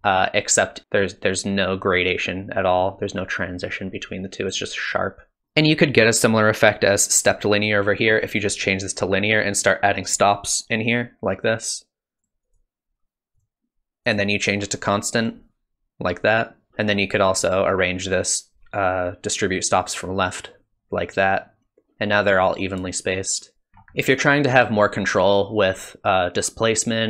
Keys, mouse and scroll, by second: 0.8 click, 4.5 click, 5.4 click, 7.9 middle click, 8.2 scroll down 1, 8.9 scroll up 1, 9.6 click, 10.2 click, 12.2 click, 12.5 click, 13.4 click, 14.2 click, 17.4 click, 23.7 scroll down 1, 23.8 scroll down 2, 24.0 middle click.